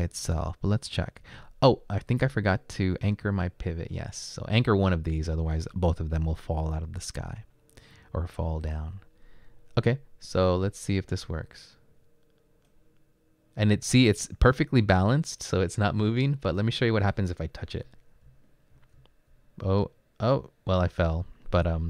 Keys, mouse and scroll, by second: 17.9 Right, 18.3 Up, 18.9 Down, 20.1 Right, 20.1 Up, 20.1 Down.